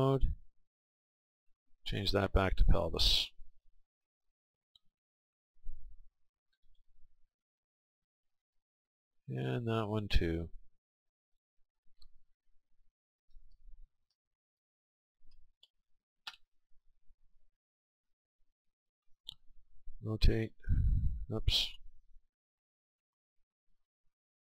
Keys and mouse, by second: 9.1-11.0 right drag, 11.3-18.7 drag, 18.7-20.5 right drag, 21.4-23.4 right drag, 23.5-24.4 drag.